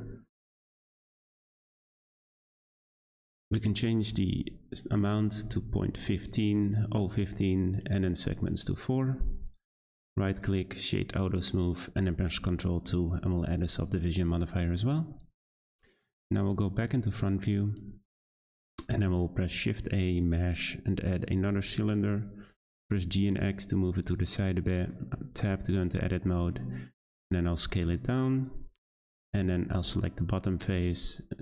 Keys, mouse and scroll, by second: 1.7-4.9 drag, 8.2-9.5 drag, 9.8-10.9 right drag, 10.9 click, 12.4 ctrl+2, 13.9 scroll up 1, 14.0-16.7 middle drag, 16.7 `, 18.7 shift+middle click, 19.5 shift+a, 21.6-22.6 scroll down 2, 22.6 g, 24.4-25.2 shift+middle drag, 25.2 Tab, 26.4 s, 28.8 middle click, 29.7 click, 30.7 s.